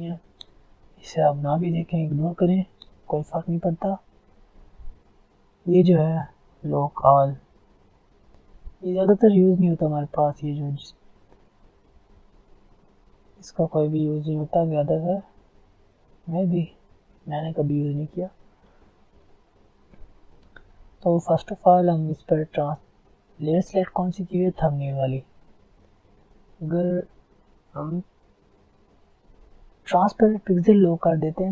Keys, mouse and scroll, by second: 11.7 click, 13.3-13.6 alt+scroll down 2, 13.6-14.2 alt+scroll up 2, 14.2 alt+scroll down 2, 14.4 alt+scroll up 2, 14.6 alt+scroll down 2, 14.8-15.3 alt+scroll up 1, 15.4-15.8 alt+scroll down 1, 15.8 alt+scroll up 1, 16.1 alt+scroll down 1, 16.5 alt+scroll up 1, 17.3 alt+scroll down 1, 18.0 alt+scroll up 1, 20.8-21.2 alt+scroll down 2, 21.2-22.0 alt+scroll up 2, 22.0-22.6 alt+scroll up 1, 22.6-23.4 alt+scroll down 2, 23.4-23.7 alt+scroll up 1.